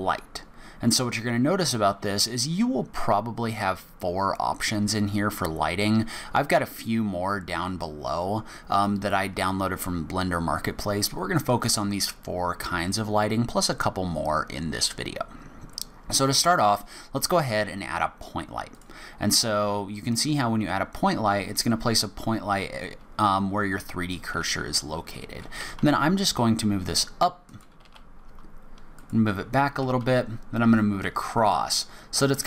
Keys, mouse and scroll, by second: 25.6 g, 27.8 g, 29.8 g, 31.8-32.3 scroll up 2.